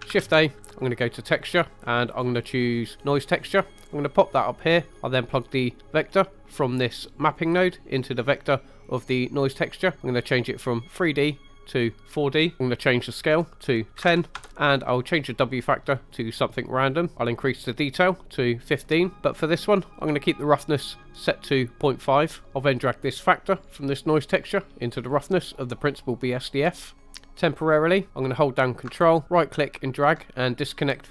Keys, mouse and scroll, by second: 0.1 shift+a, 4.6 click, 5.5 middle click, 6.1-6.4 scroll up 1, 6.4 middle click, 7.6 click, 7.9-9.3 drag, 10.8-12.1 drag, 13.1-14.4 drag, 15.5-16.5 drag, 18.1 click, 19.3 scroll up 1, 22.2 scroll down 2, 22.8 click, 23.2-25.6 drag, 26.3 middle click, 27.1 middle click, 29.2 ctrl+right click, 30.4 middle click.